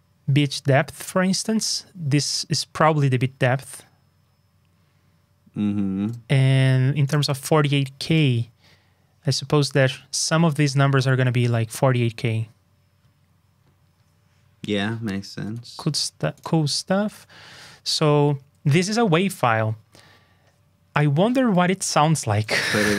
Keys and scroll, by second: 17.5 super+s, 20.9 super+j.